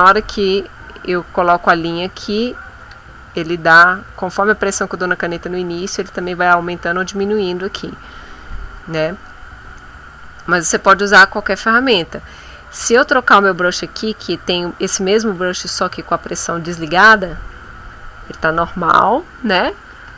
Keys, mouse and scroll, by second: 0.0 click, 1.6-3.0 drag, 13.4 click, 15.6-17.1 shift+drag, 20.0 F5.